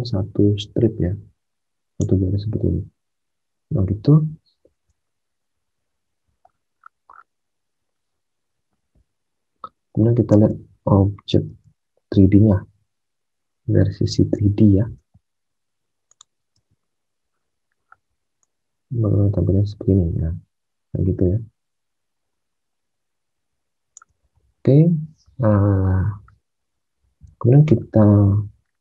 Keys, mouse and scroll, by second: 4.7 alt+Tab, 10.3 alt+Tab, 11.4 space, 15.4 space, 16.5 space, 24.0 alt+Tab.